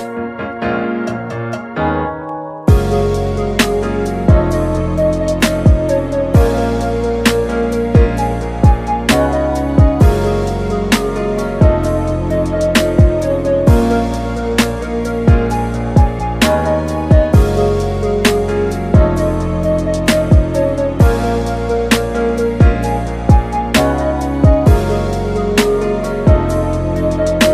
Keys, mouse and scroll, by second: 6.5 click, 16.7-17.6 scroll up 6, 23.7 click, 24.5-25.3 alt+right drag, 25.3-27.5 drag.